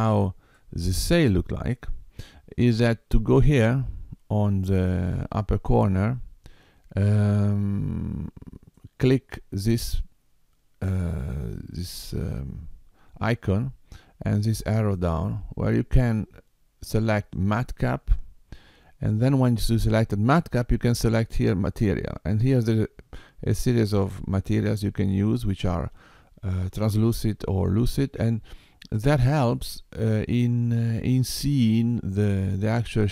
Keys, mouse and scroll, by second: 0.6 middle click, 8.9 click, 14.7 click, 32.4 middle click.